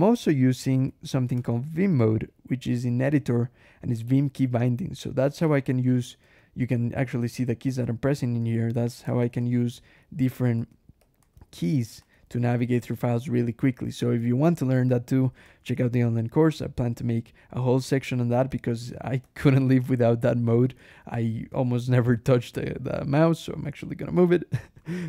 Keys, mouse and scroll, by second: 1.3 ctrl+,, 2.7-3.2 scroll down 1, 5.3 click, 5.8 click, 6.1 Escape, 7.9 click, 8.6-14.0 typing, 9.2 shift+Escape, 10.4 Escape, 15.2-16.2 typing, 17.7 shift+Escape, 17.9 k, 18.2 g, 18.5 Escape, 19.0 alt+h, 19.7 alt+Escape, 19.7-22.1 typing, 24.6 Escape, 24.9-25.0 typing.